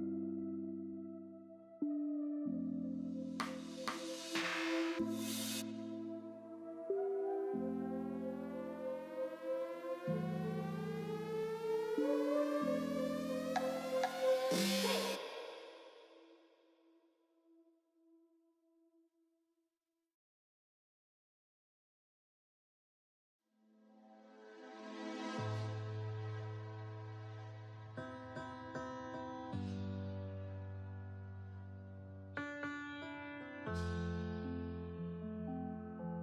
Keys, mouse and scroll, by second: 0.6 scroll down 4, 0.9 shift+middle click, 1.6 click, 1.8 Tab, 1.9 click, 2.1 alt+z, 2.6 click, 2.8 scroll down 1, 2.9-3.7 middle drag, 3.7 Tab, 4.4 l, 5.2 alt+s, 7.7-8.4 middle drag, 8.4 3, 8.8 l, 9.3 l, 10.2 m, 11.7 click, 12.6 click, 13.4 KP_3, 13.7 click, 13.7 shift+middle click, 13.9 scroll up 1, 14.1 alt+z, 14.7 1, 14.9 click, 15.9 shift+click, 17.3 2, 17.6 click, 18.5 shift+click, 19.2 shift+s, 19.8 x, 20.8 alt+z, 21.0 scroll down 2, 21.1 middle click, 21.9 l, 22.1 shift+middle click, 22.6 scroll up 2, 22.8 shift+middle click, 23.2 alt+s, 26.4-26.8 scroll down 1, 26.8 click, 27.4 shift+middle click, 28.2 KP_1, 28.5 shift+middle click, 28.7-29.3 scroll up 3, 29.3 alt+z, 29.7 click, 30.1 shift+middle click, 30.4 scroll up 2, 30.6 g, 31.9 x, 32.9 scroll down 4, 33.1 middle click, 33.3 alt+z, 33.5-33.8 scroll down 2, 33.8 click, 34.0 middle click, 34.2 Tab, 34.3 click, 34.5 shift+middle click, 35.4 scroll up 5, 35.7 middle click.